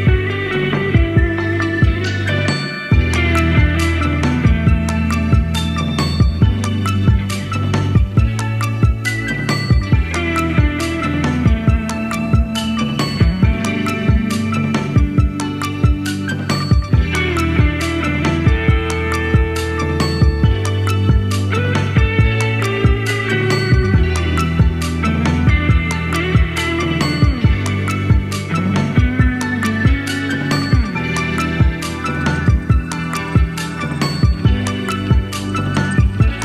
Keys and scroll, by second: 14.9 super+c, 15.0 super+v.